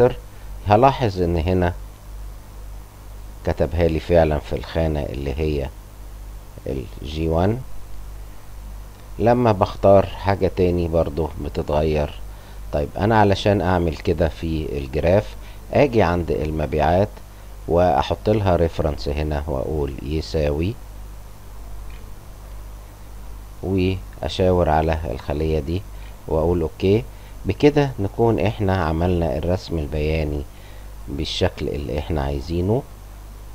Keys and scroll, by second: 20.1-22.3 typing, 25.9 Return, 26.5 \, 26.7 Home.